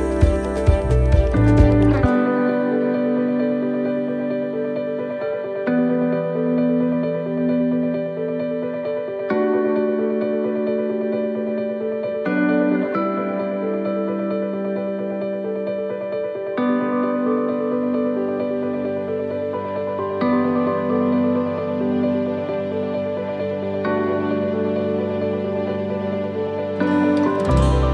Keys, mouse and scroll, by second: 1.4 click, 2.3 c, 8.2 middle click, 8.9 c, 12.0 middle click, 12.6 shift+middle click, 12.9-13.3 scroll up 3, 13.3 middle click, 14.2 shift+right click, 15.1 shift+right click, 16.0 shift+right click, 16.3 shift+middle click, 17.5 shift+right click, 17.8 middle click, 19.9 shift+right click, 20.6 shift+right click, 21.0 middle click, 22.0 shift+right click, 22.9 shift+right click, 22.9 shift+middle click, 23.5 middle click, 24.3 shift+right click, 25.6 shift+right click, 26.4 middle click, 26.4 shift+right click, 27.7 shift+right click.